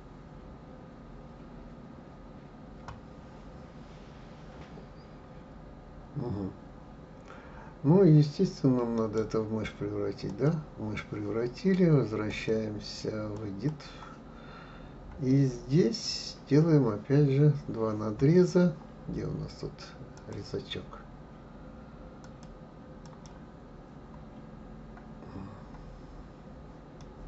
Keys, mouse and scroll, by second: 9.0-12.3 right drag, 12.3-14.9 drag, 14.9-15.3 scroll up 2, 19.1 scroll up 1, 20.1-22.4 drag, 23.1 click, 25.3-25.6 scroll up 2, 25.8-27.0 scroll down 1, 27.0-27.2 middle drag.